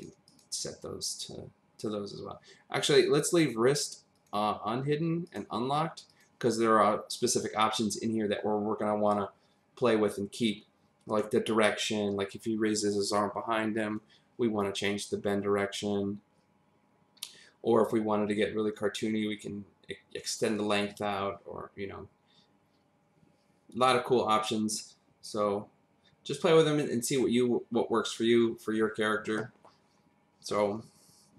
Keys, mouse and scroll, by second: 0.3 click, 4.1 click, 5.2 click, 6.2 click.